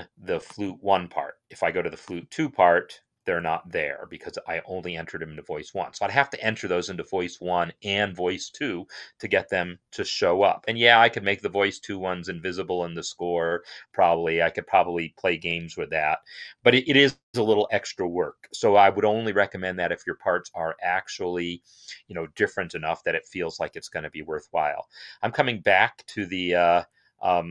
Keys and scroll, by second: 15.3 alt+f, 16.0 Up, 16.4 Up, 16.7 Up, 17.5 Return, 17.5 Return.